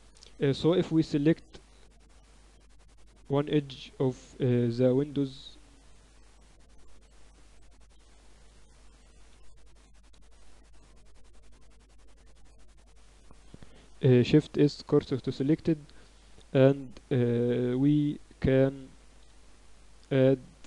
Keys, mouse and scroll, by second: 0.0 z, 3.4 middle click, 3.8 Tab, 4.2 Tab, 6.2 right click, 7.8 h, 8.7 middle click, 9.2 z, 9.8 Tab, 11.2-13.1 drag, 11.8-14.4 right drag, 12.6 a, 13.6 shift+s, 14.9 Tab, 19.2 shift+a.